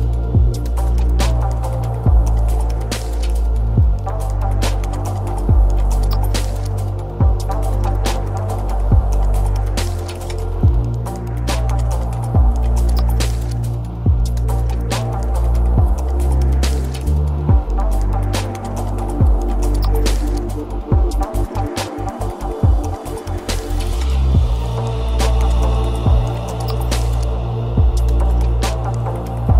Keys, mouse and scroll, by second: 4.6 click, 5.1-11.9 middle drag, 15.0-17.1 middle drag, 17.1 click, 18.8-21.9 middle drag, 22.1 click, 22.7-29.5 middle drag.